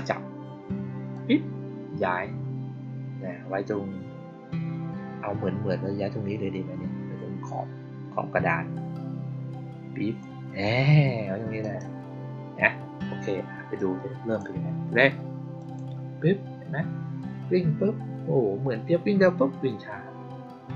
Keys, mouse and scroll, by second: 1.0-10.1 drag, 11.5 click, 13.7 click, 15.5 click.